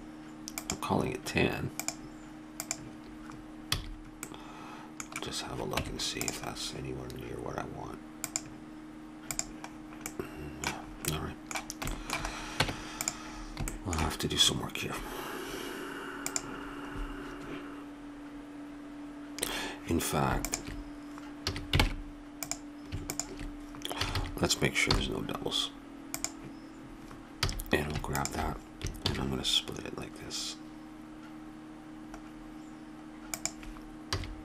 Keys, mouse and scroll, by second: 3.7 a, 5.8 Tab, 10.1-11.3 middle drag, 12.6 Tab, 16.3-17.4 middle drag, 20.4-21.5 drag, 21.5 a, 21.8 ctrl+Tab, 24.0 a, 24.1 a, 25.1 w, 27.5 a, 28.2-30.4 drag, 29.1 ctrl+b, 34.1 a.